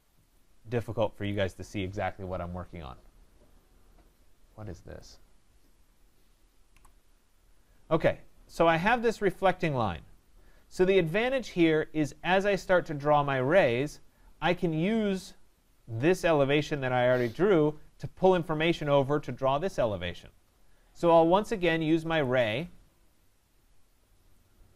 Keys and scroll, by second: 6.7 Delete.